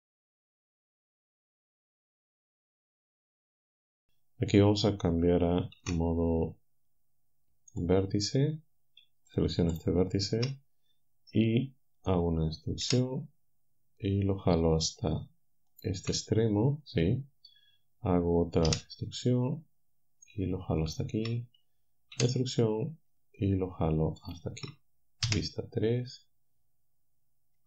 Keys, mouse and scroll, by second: 1.5-2.9 drag, 5.8 ctrl+Tab, 7.8 click, 9.3 shift+click, 9.8 shift+click, 12.8 e, 15.7 ctrl+click, 18.7 e, 20.8 ctrl+click, 22.2 e, 24.2 ctrl+click, 25.3 3.